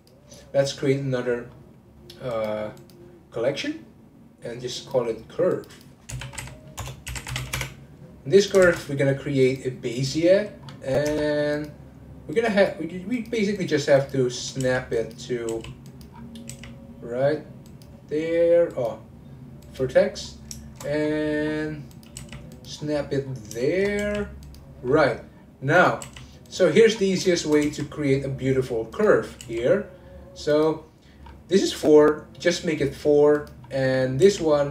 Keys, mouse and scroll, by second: 0.8-1.2 scroll up 1, 1.5-2.3 scroll up 9, 2.3 click, 2.8 click, 4.7 click, 5.7-8.5 drag, 8.6 shift+a, 10.3-10.7 scroll down 1, 10.9 scroll down 9, 11.1 Tab, 11.5 click, 12.3-14.1 drag, 14.3 scroll up 1, 14.6 g, 16.1-16.5 scroll up 3, 16.5 g, 18.7-20.0 drag, 20.0-20.3 scroll up 2, 20.3-21.0 scroll down 2, 21.5-21.9 scroll down 8, 21.9 click, 22.2 g, 22.7 scroll up 1, 23.2-23.6 scroll up 9, 23.6 shift+middle click, 24.0 g, 24.9-25.7 scroll down 10, 25.7 click, 26.0 g, 26.7-27.2 scroll up 10, 27.2 shift+middle click, 27.6 g, 31.2-32.7 scroll up 3, 33.3 click, 33.6-34.2 scroll down 1, 34.2 g.